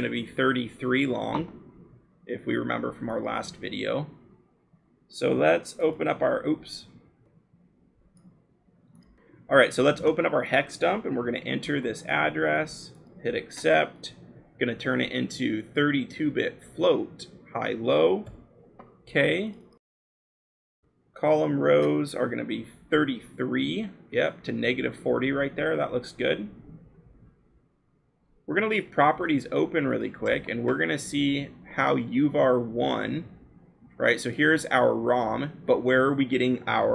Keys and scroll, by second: 11.1 a, 11.6 ctrl+v, 18.2 k, 22.5 BackSpace, 22.7 3.